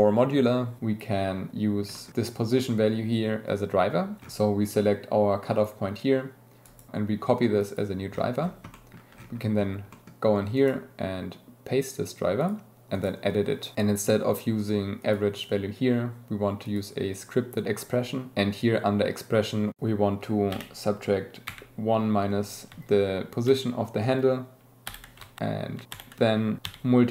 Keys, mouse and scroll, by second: 1.9 middle click, 8.7 click, 9.9 click, 10.5-12.5 drag, 12.9-27.1 drag.